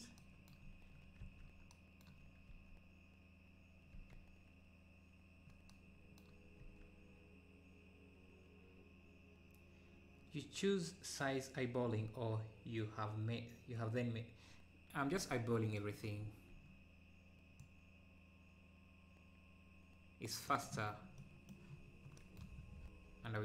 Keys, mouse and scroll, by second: 0.0 scroll up 1, 0.7-1.3 scroll up 2, 3.0 ctrl+s, 5.0 ctrl+s, 6.7 ctrl+s, 15.2 ctrl+s, 17.6-20.6 drag, 21.0-21.6 scroll down 3, 21.1 middle click, 21.8-22.3 scroll up 3, 22.7 scroll down 5.